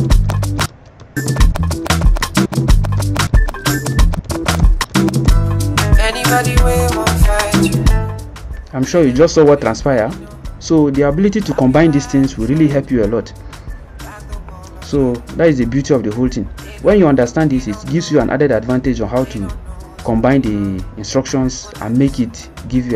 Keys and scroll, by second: 0.0-5.7 typing, 7.9 ctrl+c, 12.9 ctrl+Caps_Lock.